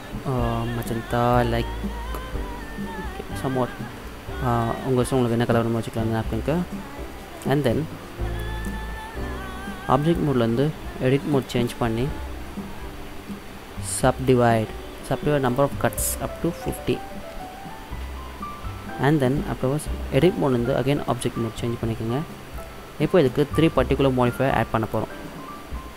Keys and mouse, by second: 4.1 middle click, 5.7 middle click, 5.9-6.4 middle drag, 9.3-10.1 middle drag, 11.5 click, 12.5-14.3 middle drag, 14.3-17.3 drag, 18.9-20.2 middle drag, 21.2 click, 24.9-25.9 drag.